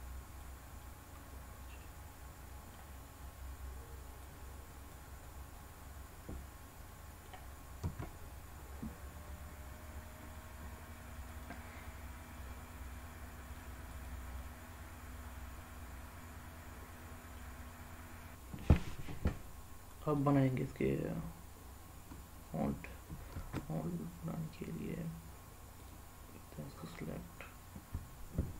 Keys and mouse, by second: 0.8-2.7 middle drag, 4.2 click, 5.5-7.2 middle drag, 7.8 s, 11.2 click, 12.5-13.6 middle drag, 13.8 drag, 14.4-17.3 middle drag, 19.4 middle click, 23.3 shift+a.